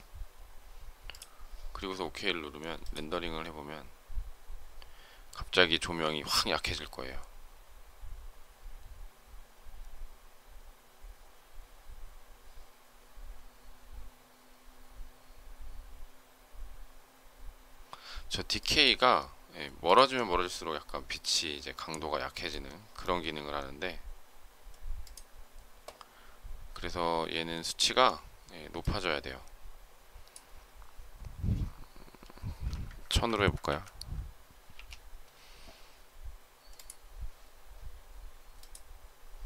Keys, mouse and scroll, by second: 33.0 Right, 34.6 Left, 34.6 0.